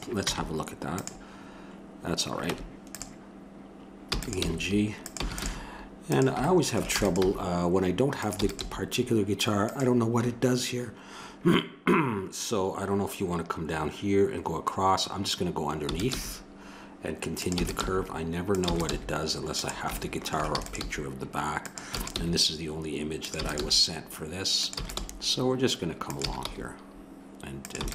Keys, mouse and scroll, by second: 0.3 Tab, 2.4 Tab, 4.0-7.2 typing, 8.4 e, 8.6 g, 15.8 e, 16.1 g, 17.6 e, 17.8 g, 18.6 e, 18.9 g, 20.5 e, 20.8 g, 22.0 e, 22.2 g, 23.4 e, 23.6 g, 24.8 e, 25.0 g, 26.2 e, 27.8 e.